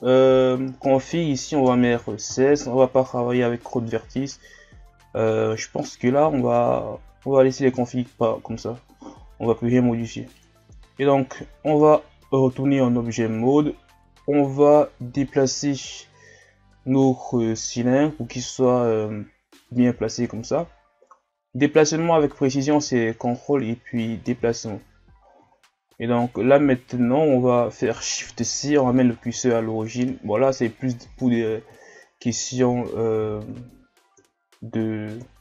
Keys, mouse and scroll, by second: 0.4-3.4 drag, 9.7-10.4 scroll up 1, 10.6 Tab, 11.7 Tab, 14.6-24.9 drag, 24.9-25.5 scroll up 1, 25.5-25.9 shift+scroll down 1, 25.9-26.4 scroll up 1, 28.2 shift+c, 29.2 shift+scroll down 5, 29.5-30.1 scroll up 5, 30.1 scroll down 1, 31.8 scroll down 2, 31.8 shift+scroll up 6, 32.9 scroll down 3, 33.4-34.2 shift+scroll up 1, 34.2 KP_3, 35.2 KP_1.